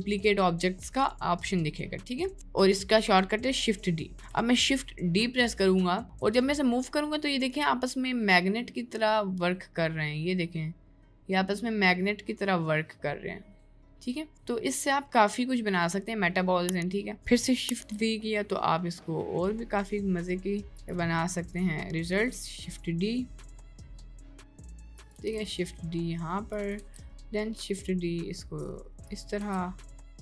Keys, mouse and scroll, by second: 5.3 shift+d, 17.8 shift+d, 22.4 shift+d, 25.3 shift+d, 26.9 shift+d, 29.4 shift+d.